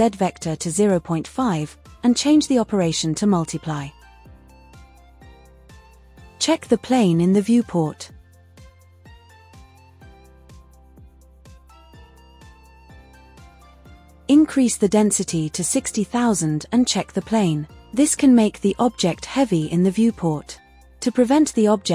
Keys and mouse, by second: 0.8-3.4 drag, 4.2-6.7 drag, 9.3-10.0 drag, 13.1-16.6 drag, 16.3 KP_0.